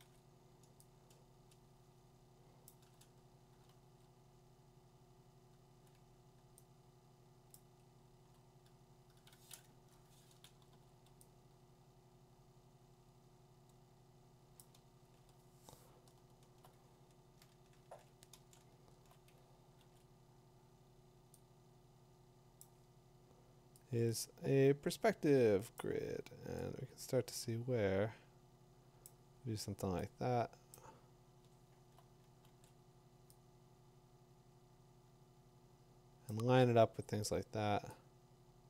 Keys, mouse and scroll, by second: 0.0 ctrl+t, 2.7 click, 3.9 v, 7.5 click, 7.6 z, 9.7-10.7 drag, 11.6 Return, 11.6 v, 14.6 click, 15.3-15.8 middle click, 15.8 middle click, 17.8 ctrl+j, 18.3 ctrl+middle click, 18.4 ctrl+space, 18.5 middle click, 18.9 middle click, 19.6 middle click, 19.8 ctrl+t, 22.8-29.0 drag, 30.7 click, 31.4 middle click, 31.5 middle click, 32.5 ctrl+t, 32.5 middle click, 36.3 click.